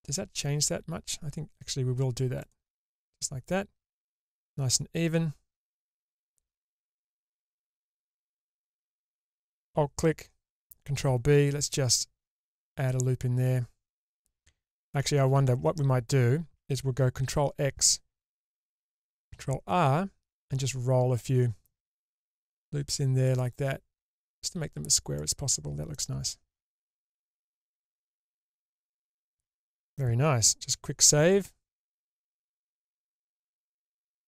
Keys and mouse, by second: 0.0 ctrl+z, 3.0 middle click, 6.9 shift+middle click, 7.5 middle click, 8.7 alt+click, 11.0 ctrl+b, 15.4 ctrl+z, 17.2 ctrl+x, 19.3 ctrl+r, 25.1 click, 25.9-29.9 middle drag, 32.6 ctrl+s.